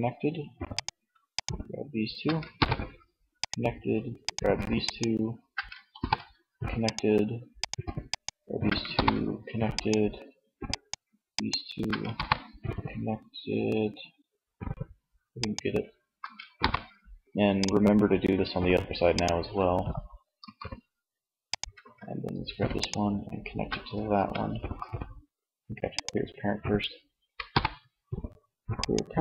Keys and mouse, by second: 1.6 ctrl+p, 5.2 ctrl+p, 8.0 ctrl+p, 11.4 ctrl+p, 12.6 click, 14.7-15.8 right drag, 15.8 ctrl+p, 19.6 r, 20.8 click, 21.1 ctrl+z, 26.8 alt+p.